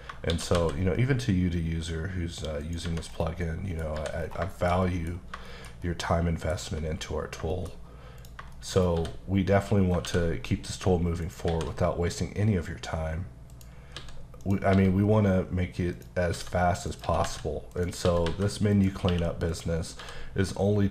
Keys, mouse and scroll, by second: 0.3 shift+d, 2.6 click, 2.8 Tab, 3.1-3.4 scroll down 2, 3.4 middle click, 4.0 h, 4.2 scroll down 3, 4.5 shift+middle click, 5.1 scroll up 2, 5.5 shift+middle click, 7.6 shift+middle click, 7.8-8.2 scroll up 1, 8.2 click, 8.5 shift+middle click, 8.8 scroll up 1, 9.0 d, 9.8 scroll down 2, 10.1 alt+w, 11.3 shift+right click, 11.5 shift+a, 13.5 click, 14.0 s, 14.4 click, 14.7 s, 16.0 click, 16.3-20.0 typing, 16.9 click, 17.7 click, 18.7 click, 19.5 click.